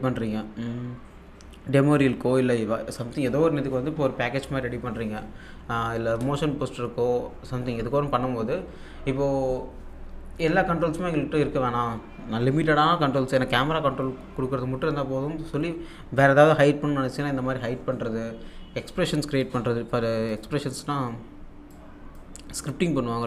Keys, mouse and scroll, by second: 19.4 click, 21.8-23.2 drag.